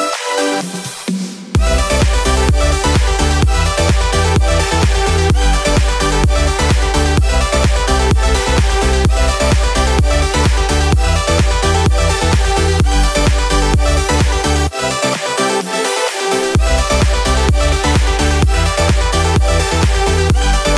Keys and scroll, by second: 3.8 ctrl+z, 9.6 ctrl+z.